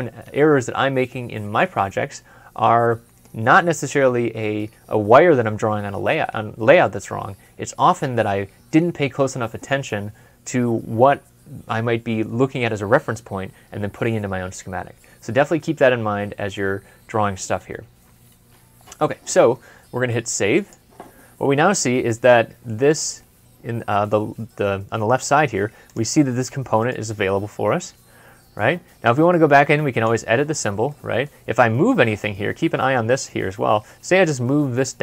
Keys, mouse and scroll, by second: 17.9 ctrl+F12, 21.2 scroll up 1, 21.6 scroll down 1, 25.0-25.9 scroll down 1, 26.7 right click, 30.7 middle click, 34.4 m.